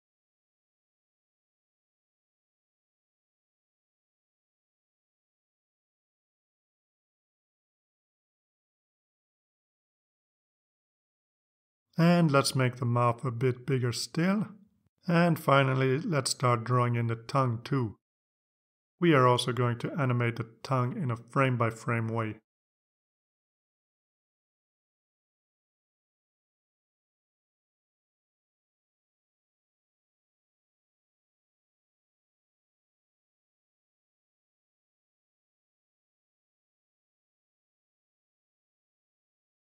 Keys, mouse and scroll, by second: 0.1 click, 1.5 ctrl+x, 4.1 ctrl+x, 5.0 click, 5.1 right click, 7.6 click, 9.0 click, 10.7 click, 12.4-14.8 drag, 16.0 click, 18.4 click, 22.9 click, 25.0 click, 25.6 click, 26.8 click, 29.1 b, 30.1-31.3 drag, 32.6 click, 34.7-36.2 drag, 37.2 click, 39.6-39.7 drag.